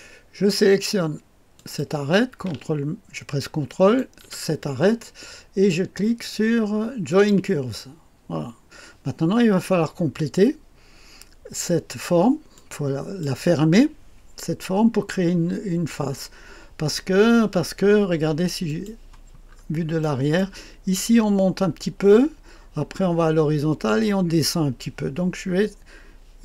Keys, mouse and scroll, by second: 1.5 click, 3.7 ctrl+click, 4.3 click, 7.1 click, 12.5-13.6 drag, 18.6 click, 19.4-20.0 scroll up 1, 20.0-21.5 drag, 22.1-22.9 scroll down 1.